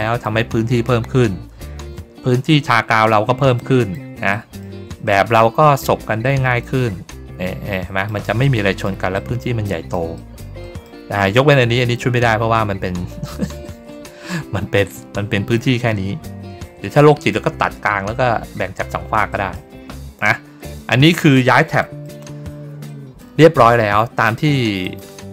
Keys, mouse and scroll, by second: 3.5 middle click, 4.2 middle click, 4.9 middle click, 5.7 ctrl+scroll down 1, 6.1 middle click, 7.6 middle click, 8.3 middle click, 9.0 middle click, 9.5 middle click, 10.0 middle click, 10.5 middle click, 11.0 ctrl+middle click, 11.4 ctrl+middle click, 13.3 ctrl+middle click, 19.2 middle click, 19.7-20.3 ctrl+scroll down 4, 20.6 middle click, 21.7 middle click, 22.8 middle click, 24.7 click.